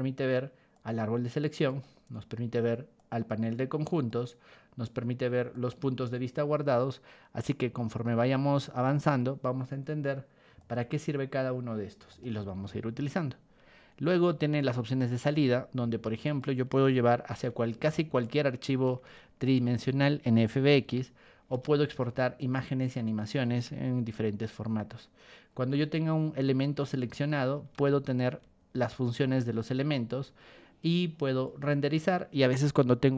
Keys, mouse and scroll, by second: 0.7 click, 1.7 click, 2.9 click, 3.9 click, 5.5 click, 7.9 click, 9.0 click, 10.6 click, 12.1 click, 14.5 click, 15.3 ctrl+1, 16.2 click, 18.2 ctrl+click, 19.4 ctrl+shift+click, 20.8 Escape, 21.5 ctrl+1, 21.8 click, 21.8 right click, 22.4 ctrl+click, 23.5 Escape, 25.5 Escape, 27.1 click, 27.7 ctrl+1, 28.0 click, 28.8 ctrl+click, 29.6 Escape, 31.4 click.